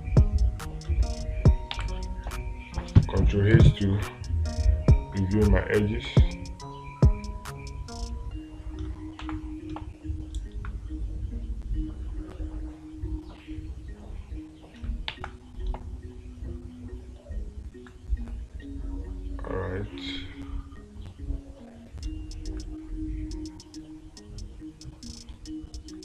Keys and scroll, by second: 2.2 space, 9.7 space, 15.5 space.